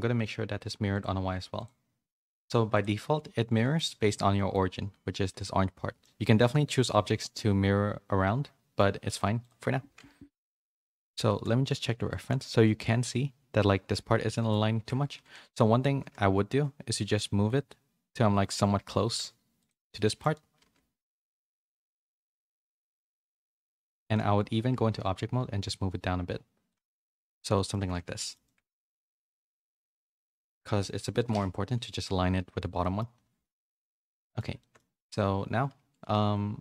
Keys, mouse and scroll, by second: 0.9 click, 1.5 click, 2.7 click, 3.4 a, 3.5 shift+middle click, 4.3 middle click, 6.0 middle click, 7.1-8.4 middle drag, 8.5 middle click, 10.3 KP_1, 11.2 shift+middle click, 11.6 z, 12.0 shift+middle click, 14.3 shift+middle click, 14.7 Tab, 15.1 a, 15.8 g, 20.0 shift+middle click, 23.9 Tab, 24.7 g, 27.1 z, 27.3 middle click, 27.8 a, 27.9 a, 28.1 middle click, 28.4 shift+middle click, 28.8-30.0 middle drag, 31.2 KP_1, 32.8 middle click, 33.4 middle click, 33.8 middle click, 34.6 shift+middle click, 35.9 right click.